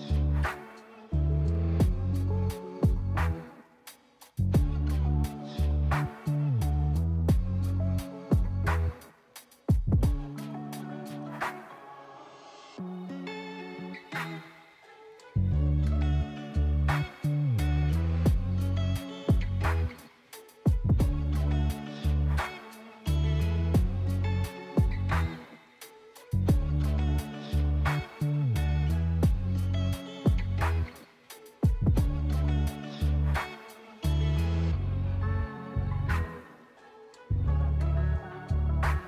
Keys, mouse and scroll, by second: 0.7 Delete, 1.1 click, 2.1 click, 3.0-4.1 middle drag, 4.1-4.9 scroll down 2, 4.9 click, 5.9-6.9 middle drag, 6.9-7.3 scroll up 1, 8.7 click, 9.9-13.1 middle drag, 13.1 s, 15.1 click, 16.0 click, 17.1-19.6 middle drag, 19.6-20.4 scroll up 1, 20.4 click, 21.6 click, 21.9-23.1 middle drag, 23.1 click, 23.6 click, 25.4 s, 26.9 click, 27.8-29.9 middle drag, 29.9 click, 31.5 click, 32.4 click, 33.1-35.9 middle drag, 35.9 click, 36.9 s.